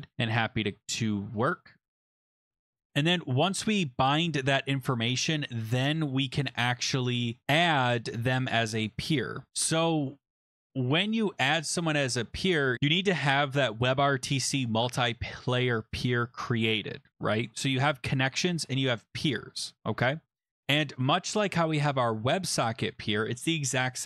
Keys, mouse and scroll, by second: 0.0 Return, 0.8 click, 1.3 BackSpace, 4.0 click, 5.4 click, 6.7 Down, 12.7 click, 20.8-21.7 scroll, 22.7 click, 23.5 Return, 23.9-24.0 typing.